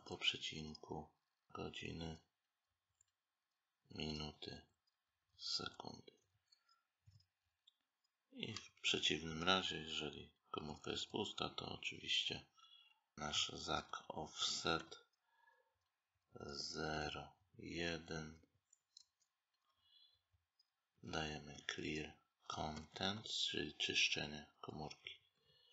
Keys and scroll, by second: 18.6 space.